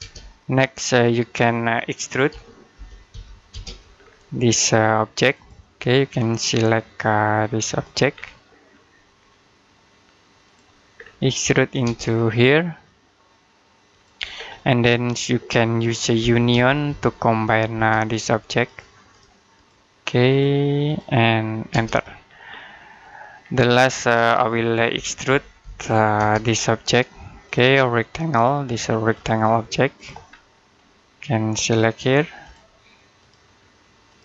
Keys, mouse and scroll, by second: 1.9-3.5 typing, 3.8-5.2 scroll up 1, 5.2 click, 7.7 click, 8.0 scroll down 1, 8.2 middle click, 9.0-10.3 scroll up 1, 10.3 click, 10.8-11.1 scroll down 1, 11.1 middle click, 11.7 space, 12.0-12.7 scroll up 1, 13.7 click, 14.2-14.6 scroll down 1, 14.6 middle click, 16.0-16.4 typing, 17.6 space, 17.9 click, 21.5 space, 22.2-22.6 scroll down 1, 22.6 middle click, 23.3 scroll up 1, 24.5-26.0 typing, 26.3-27.3 scroll up 1, 27.3 click, 30.1 scroll down 1, 30.4 middle click, 32.3 click.